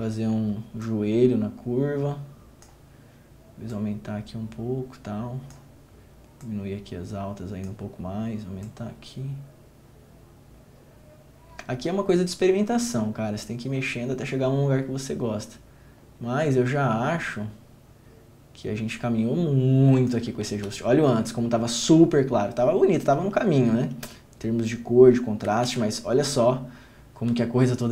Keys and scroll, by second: 20.7 ctrl+d, 25.8 ctrl+d.